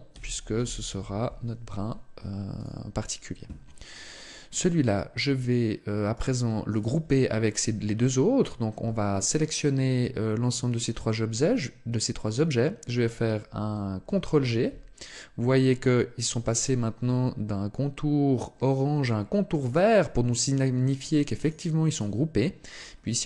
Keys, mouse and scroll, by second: 4.3 right click, 5.9 shift+right click, 13.8 ctrl+g, 19.3 right click, 20.1 right click, 20.8 right click, 21.2 right click, 21.7 right click, 22.5-23.2 scroll down 1.